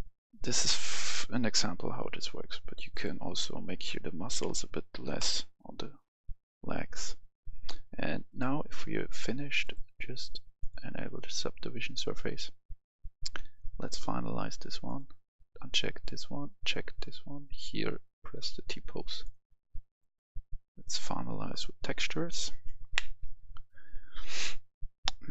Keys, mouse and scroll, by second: 2.9 click, 4.9 6, 5.1 Return, 8.2-25.3 drag.